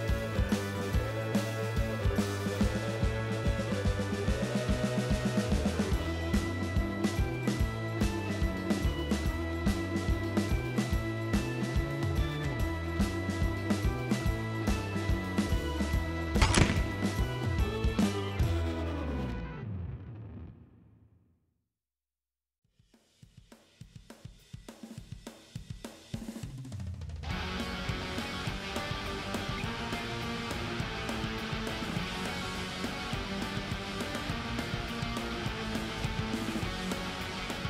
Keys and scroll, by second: 5.4-6.9 typing, 7.2 ctrl+z, 8.9 w, 37.4 ctrl+z.